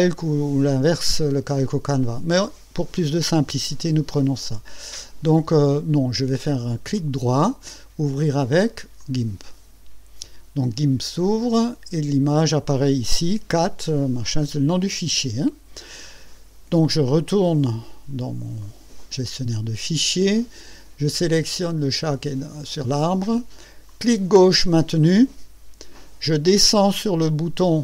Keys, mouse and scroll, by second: 2.9-6.1 drag, 6.5 click, 7.0 right click, 9.0 click, 17.6 click, 18.6 click, 23.9-27.8 drag.